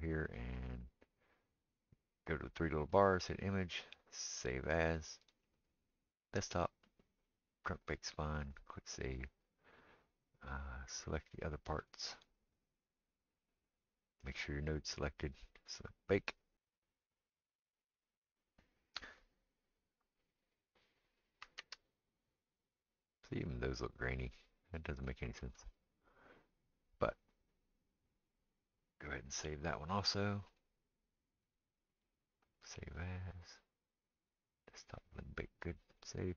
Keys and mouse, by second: 0.7-11.9 drag, 11.9-14.3 middle drag, 14.3 click, 14.5-15.6 middle drag, 15.6-36.3 drag, 21.7 ctrl+space, 25.6 ctrl+space.